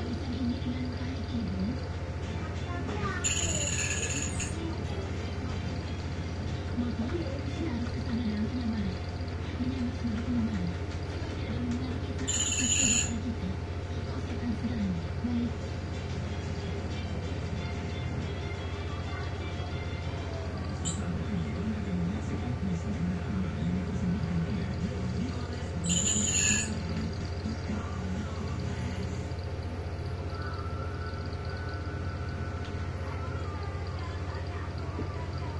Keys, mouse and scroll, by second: 0.3 click, 1.8 click, 3.1 0, 3.5 Return, 5.6 shift+Home, 6.7 0, 7.1 8, 9.1-12.7 typing, 16.4 click, 19.1 click, 21.0 click, 23.4-25.0 drag, 25.5 click, 26.8-27.9 ctrl+scroll up 3, 29.8-31.1 drag, 31.6 click, 32.8 Up.